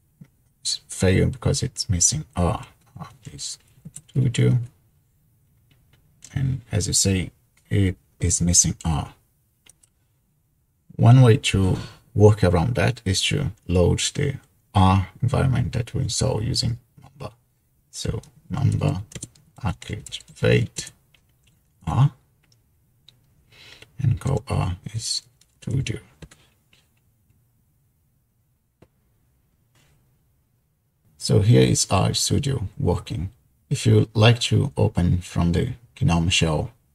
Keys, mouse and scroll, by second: 2.8-4.7 typing, 9.8-10.8 drag, 18.7-21.5 typing, 21.9 Return, 24.1-26.2 typing.